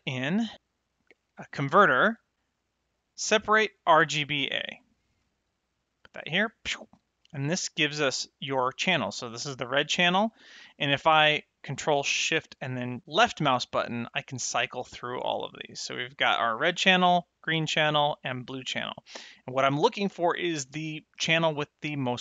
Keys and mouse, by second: 4.0 click, 6.2 click, 13.3 ctrl+shift+click, 14.5 ctrl+shift+click, 14.9 ctrl+shift+click, 15.3 ctrl+shift+click, 15.7 ctrl+shift+click, 16.1 ctrl+shift+click, 17.8 ctrl+shift+click.